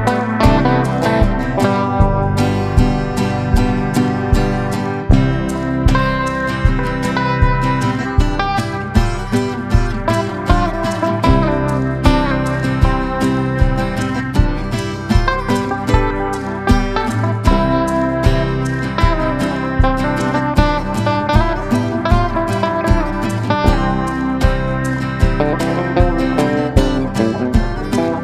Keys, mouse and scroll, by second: 11.6-13.0 drag, 14.2-22.0 shift+drag, 24.2 click.